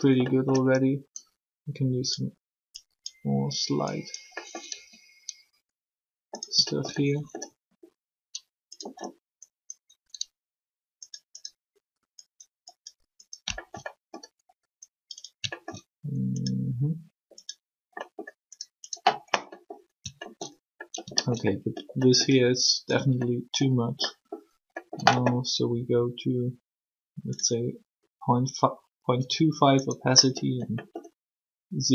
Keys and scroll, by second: 4.7 r, 7.5 alt+shift+r.